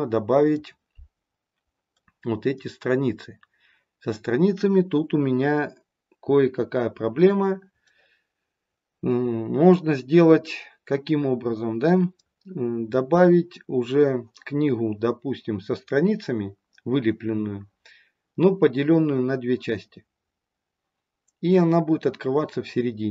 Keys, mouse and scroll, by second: 1.2-1.6 scroll up 1, 1.9 middle click, 7.8 middle click, 9.3 middle click.